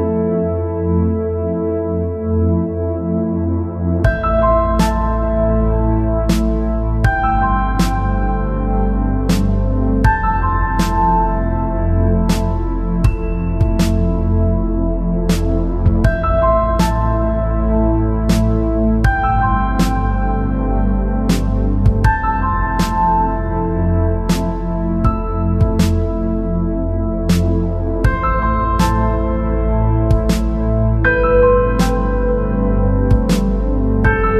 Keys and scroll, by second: 26.3 ctrl+z.